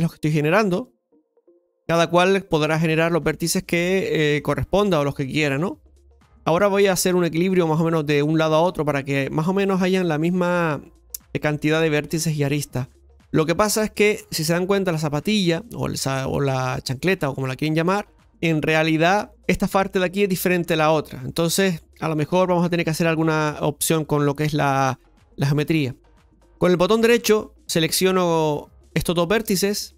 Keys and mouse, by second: 1.7 ctrl+click, 2.6 ctrl+click, 4.4 ctrl+click, 5.3-9.2 ctrl+drag, 11.6 ctrl+click, 13.1 ctrl+click, 15.5-18.3 ctrl+drag, 19.2 ctrl+click, 21.6 shift+middle click, 24.5 click, 27.1 click.